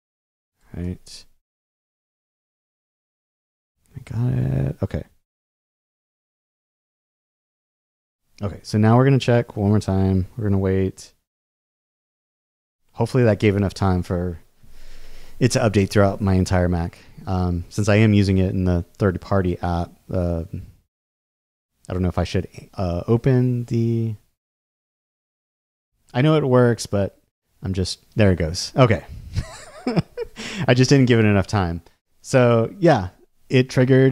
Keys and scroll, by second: 0.8 super+w.